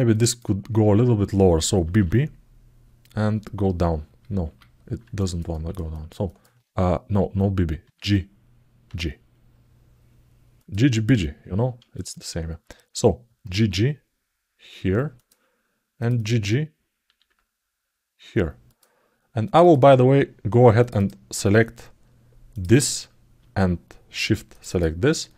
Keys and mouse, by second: 0.0 click, 4.9 alt+middle click, 5.3 ctrl+alt+middle click, 5.7 alt+shift+middle click, 6.0 alt+middle click, 11.7 click, 11.9 click, 15.8 click, 15.9 click, 19.2 click, 20.6 click, 20.7 click, 22.3 click, 24.2 shift+click, 24.4 shift+click, 25.3 alt+middle click.